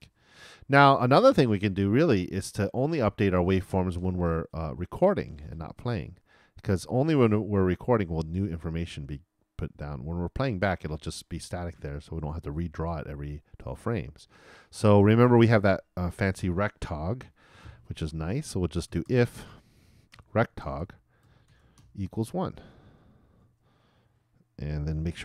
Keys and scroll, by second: 19.8-21.1 typing, 23.6-25.0 typing.